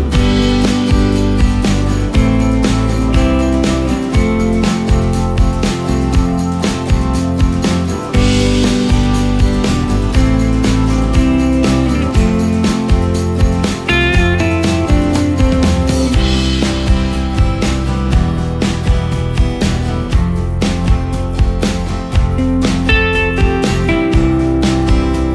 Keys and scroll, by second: 18.0 Delete, 18.6 ctrl+space, 20.7 Delete, 23.5 space.